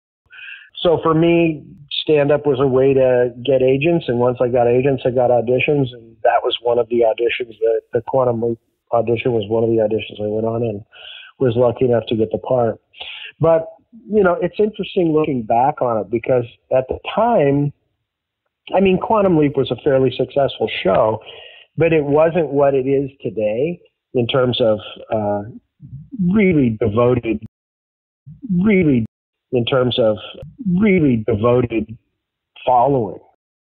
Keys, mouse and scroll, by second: 0.1 click, 0.1 space, 2.6 ctrl+s, 4.1-5.4 drag, 5.8 click, 6.6 click, 7.5 click, 8.8 click, 14.9-16.1 drag, 16.5 click, 17.4 click, 18.4 click, 20.2 ctrl+s, 26.3-27.4 drag, 27.4 space, 28.0 ctrl+shift+Delete, 28.2 space, 29.0 space, 29.2 click, 29.2 space, 33.2 space.